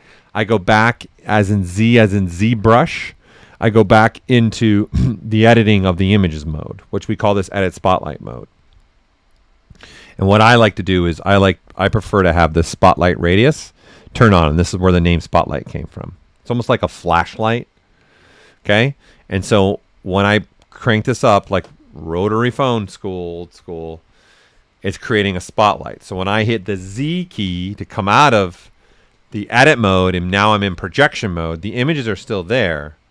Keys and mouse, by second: 14.4-24.4 drag, 27.4 z.